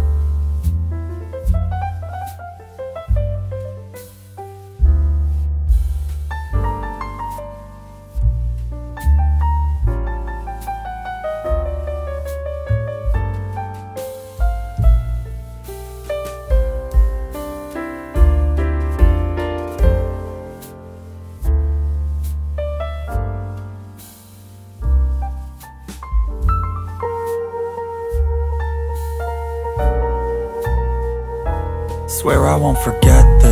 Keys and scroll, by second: 15.2 ctrl+alt+z, 18.8 ctrl+j, 20.8 ctrl+], 23.8 Delete, 28.3 ctrl+z, 33.3 ctrl+t.